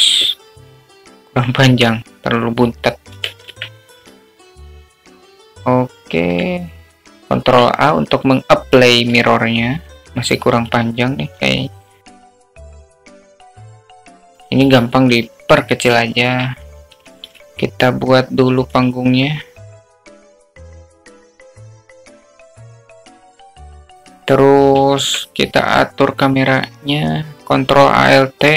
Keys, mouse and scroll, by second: 1.0 Tab, 1.0 alt+z, 1.0 click, 1.6 ctrl+z, 2.2 alt+z, 2.6 click, 3.8-5.1 drag, 5.1 Tab, 5.5 alt+z, 6.3-7.0 alt+middle drag, 7.3 click, 8.6 ctrl+a, 10.0 alt+z, 10.0 `, 10.3 a, 10.8 click, 12.6 click, 12.6 2, 12.8 click, 13.1 click, 13.3 Tab, 13.5 alt+z, 13.6 alt+middle drag, 13.8 alt+middle click, 14.0 click, 14.2 alt+middle click, 16.2 click, 16.6 s, 18.0-18.4 shift+middle drag, 19.1 shift+a, 19.9 s, 20.6 alt+middle click, 21.0 click, 21.2 click, 22.1-22.6 drag, 22.8 drag, 23.1 s, 23.4 alt+middle drag, 23.7-24.6 drag, 27.0 shift+a.